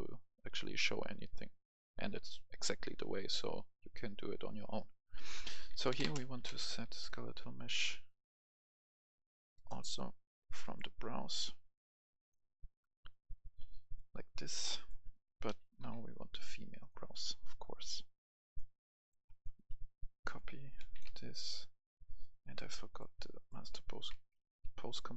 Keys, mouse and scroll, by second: 5.9-6.7 typing, 9.5 Return, 10.4-14.7 drag, 14.8 click, 15.6-15.9 typing, 16.8 click, 17.1 right click, 18.5 click, 20.8 ctrl+c, 20.9 click, 21.0 y, 21.8 click, 22.4 right click, 23.3 click, 23.8 ctrl+right click, 24.4 ctrl+click.